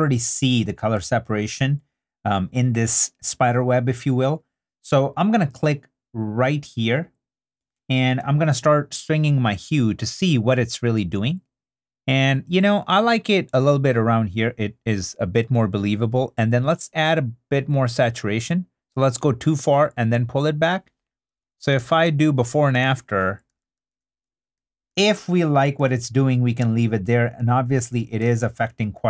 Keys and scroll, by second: 22.3 super+d, 25.1 super+d.